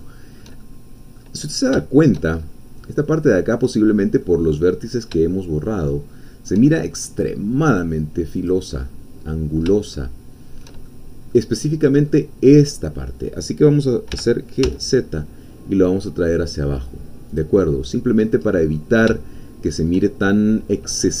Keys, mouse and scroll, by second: 0.0 shift+click, 0.1 shift+middle click, 0.2 shift+click, 0.4 shift+middle click, 0.7 shift+middle click, 1.0 click, 1.4 middle click, 1.5 scroll down 1, 1.9 shift+middle click, 2.4-3.0 shift+scroll up 2, 3.0 middle click, 3.8-4.2 scroll down 2, 4.2-7.4 drag, 8.5 click, 8.8 middle click, 9.8-10.8 shift+middle drag, 10.9 shift+middle click, 11.2 click, 11.9-12.3 scroll up 1, 14.1 g, 14.6 z, 17.3 click, 17.6 middle click, 18.5 scroll down 2, 19.2-20.2 shift+drag, 20.2-21.2 shift+scroll up 3.